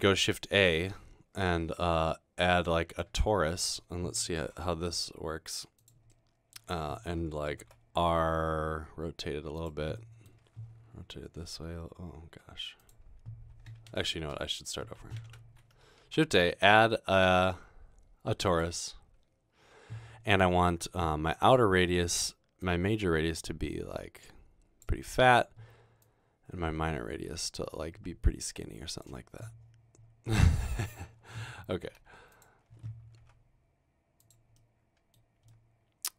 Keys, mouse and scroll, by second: 0.0 a, 2.9 click, 3.5 middle click, 4.6 typing, 7.6 typing, 10.0 middle drag, 11.5 r, 14.0 ctrl+z, 14.2 ctrl+z, 14.4 ctrl+z, 16.1 a, 18.5 click, 30.4-30.9 scroll down 2, 32.1 typing, 33.4 typing.